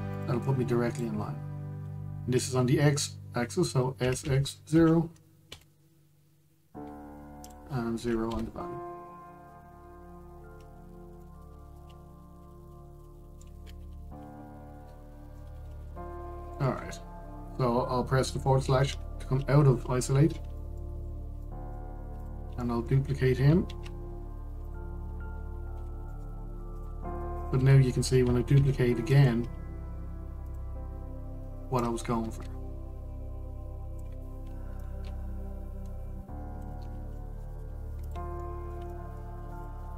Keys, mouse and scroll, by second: 1.1 click, 4.7 s, 8.1-10.5 drag, 10.5 scroll down 1, 11.9-14.5 middle drag, 14.5 Tab, 14.9-15.3 scroll down 1, 16.0-19.1 middle drag, 19.6 KP_Divide, 20.9-21.2 scroll down 1, 21.2-21.6 shift+middle drag, 21.6-22.1 scroll up 1, 22.1-22.8 shift+middle drag, 22.8 click, 23.3-24.3 shift+middle drag, 24.3 shift+d, 25.3 click, 26.4 shift+d, 28.1 click, 29.2 shift+d, 31.1-32.5 drag, 34.8 shift+d, 35.5 click, 37.8-38.7 middle drag, 38.7 click, 39.1-39.9 middle drag.